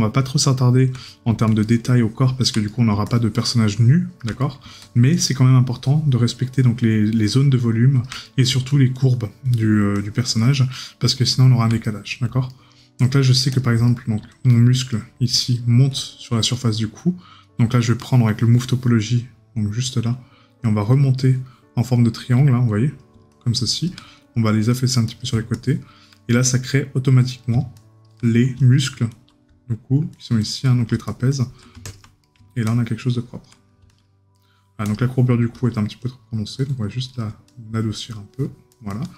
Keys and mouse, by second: 1.1 right click, 4.4 right click, 8.2 right click, 11.8 right click, 16.5 right click, 21.2 right click, 26.2 right click, 28.2 right click, 32.2 right click, 34.4 right click.